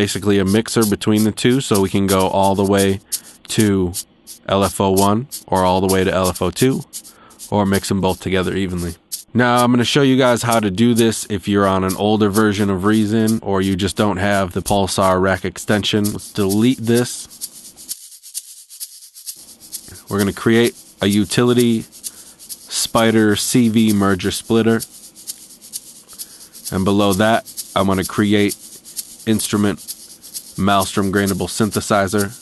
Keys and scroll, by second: 14.9 BackSpace.